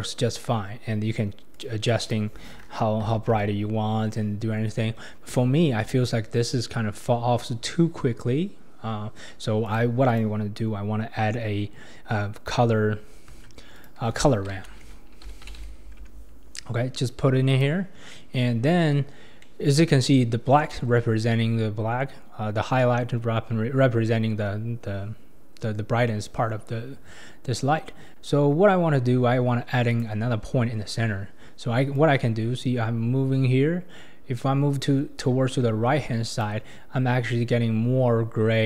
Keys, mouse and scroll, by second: 1.5-4.5 drag, 9.7 click, 10.1 click, 13.3 shift+a, 18.0 scroll down 2, 18.1-18.6 middle drag, 18.6-19.4 scroll up 6, 19.4-19.9 middle drag, 19.9-21.0 scroll up 3, 29.9-34.9 drag.